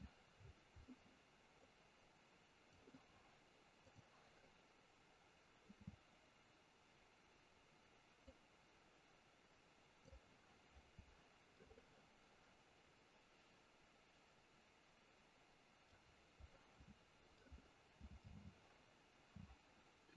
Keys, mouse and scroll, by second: 0.3-1.5 scroll down 6, 1.5 click, 3.8 click, 7.2-8.2 scroll down 3, 8.2 click, 11.7 middle click, 12.5 middle click, 17.0 scroll down 2, 17.3 middle click, 19.1-20.1 scroll down 1.